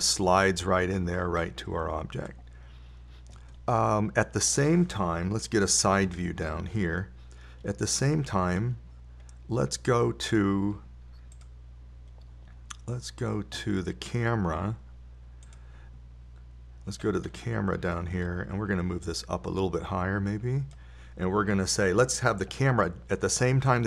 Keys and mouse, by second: 7.5 KP_3, 18.9-19.4 middle drag, 20.5-22.5 drag.